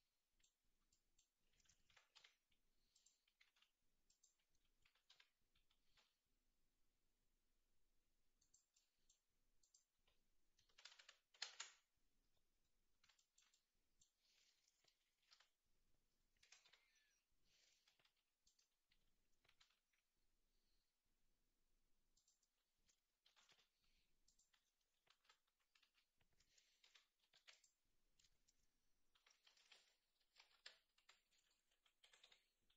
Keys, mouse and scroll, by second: 0.1 middle click, 0.9 middle click, 1.9 g, 3.3 g, 4.8 r, 8.7 middle click, 9.6-11.6 drag, 10.9 KP_0, 15.3 KP_7, 16.4 g, 19.4 r, 23.3 shift+d, 25.1 alt+r, 29.2 r, 31.7 f, 32.1 g.